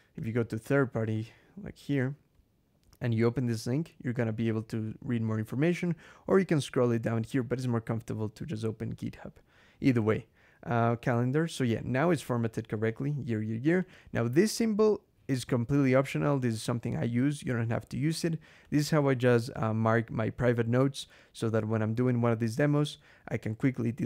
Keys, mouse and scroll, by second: 0.0 click, 1.0 click, 1.8 click, 5.9-7.1 scroll down 6, 8.8 Escape, 9.8 scroll down 2, 10.6 click, 11.6 scroll down 2, 12.7 click, 13.6-14.5 drag, 18.4 click.